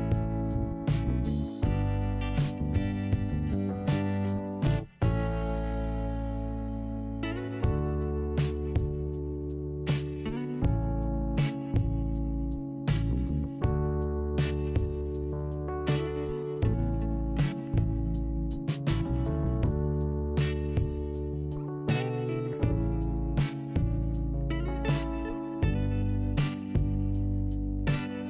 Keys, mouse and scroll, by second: 0.3 scroll up 2, 1.2 click, 2.4 middle click, 2.9 scroll up 1, 3.9 click, 6.4 scroll down 1, 7.1 scroll up 1, 7.9 click, 8.0 click, 9.2 click, 9.2 click, 12.5 click, 14.1 click, 14.5 scroll down 1, 15.1 scroll down 1, 16.1 click, 21.3 click, 21.4 click, 21.9 click, 22.0 click, 22.7 scroll down 1, 23.9 click.